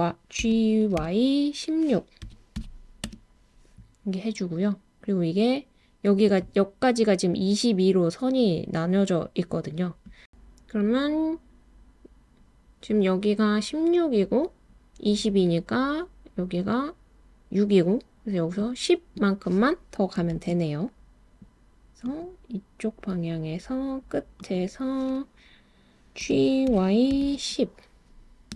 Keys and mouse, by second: 0.4 g, 1.0 y, 2.3 1, 2.6 6, 3.0 Return, 20.3 super+r, 24.4 click, 26.2 g, 26.7 y, 27.1 1, 27.3 0.